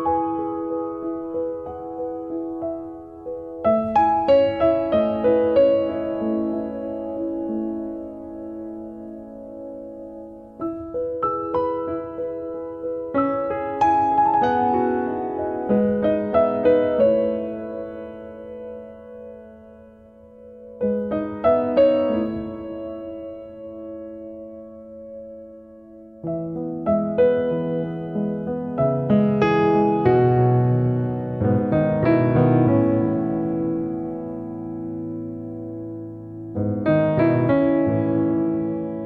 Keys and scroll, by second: 6.1 2.